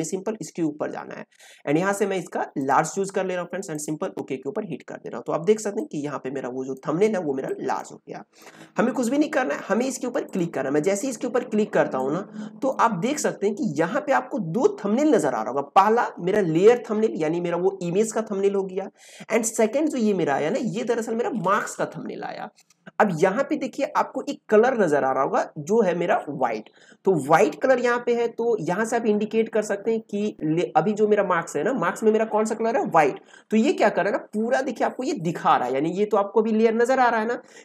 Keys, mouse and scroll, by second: 2.6-7.4 drag, 10.2-37.6 drag.